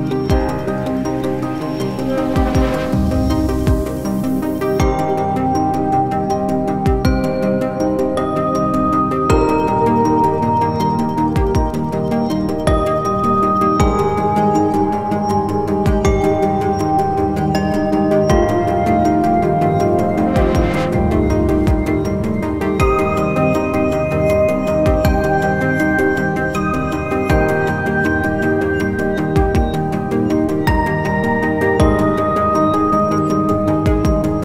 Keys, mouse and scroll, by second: 1.2 ctrl+g, 2.7-4.6 drag, 6.6 Down, 7.1 Down, 7.2 Down, 11.8 click.